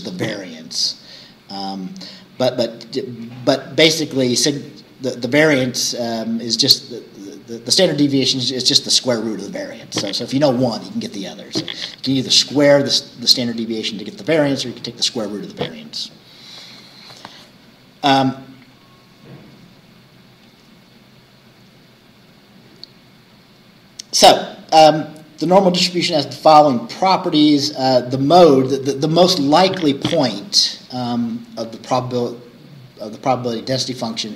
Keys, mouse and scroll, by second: 21.7 scroll down 2.